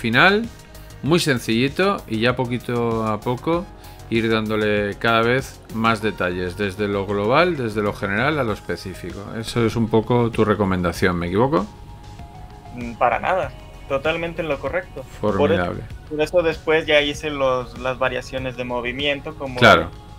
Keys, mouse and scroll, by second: 19.9 right click.